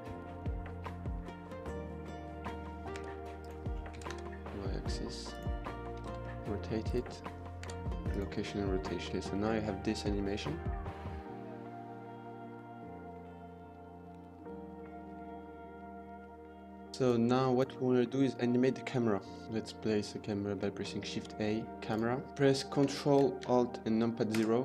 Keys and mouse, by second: 2.5 g, 3.9 middle click, 4.0 ctrl+z, 4.0 g, 4.0 y, 5.9 r, 5.9 e, 5.9 z, 8.1 k, 9.1 space, 9.2-9.7 middle drag, 10.0 middle drag, 10.4-10.7 middle drag, 17.8-18.5 middle drag, 19.0 middle click, 19.4 shift+a, 20.4 shift+a, 24.1 ctrl+alt+KP_0.